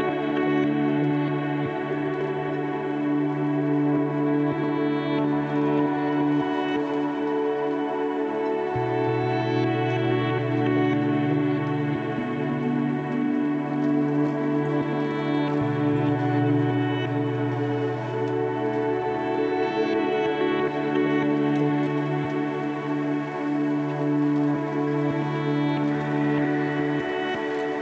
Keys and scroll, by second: 22.2 1, 27.3 m.